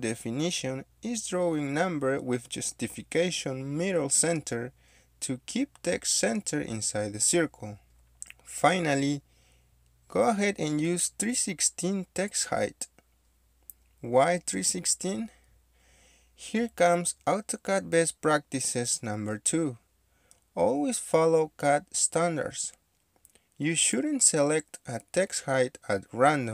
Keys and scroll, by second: 0.0-0.9 typing, 2.6 shift+-, 3.6-5.6 typing, 12.6 KP_3, 12.8 KP_Divide, 13.1 KP_1, 13.3 KP_6, 14.3 shift+', 22.0-23.2 typing, 24.7 Return.